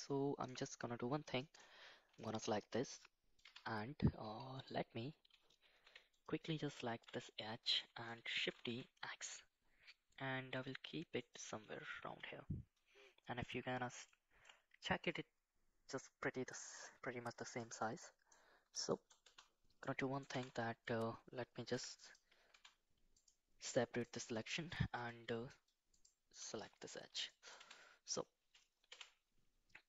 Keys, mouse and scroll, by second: 0.5 click, 1.4 shift+middle drag, 2.1 shift+middle drag, 2.7-3.4 middle drag, 3.4 Tab, 4.6 click, 5.8 2, 6.1 click, 7.4 middle click, 8.4 shift+d, 11.2 click, 12.0 KP_1, 14.0 shift+middle click, 16.7 shift+middle click, 17.5 shift+middle click, 17.9 middle click, 18.9 shift+middle click, 19.2 Tab, 19.8 middle click, 20.3 Tab, 21.7 p, 22.5 Tab, 23.1 click, 23.6 click, 24.0 click, 25.0 KP_1, 25.9 click, 26.5 shift+z, 27.3 shift+middle click, 27.6 Tab, 28.9 2, 28.9 1.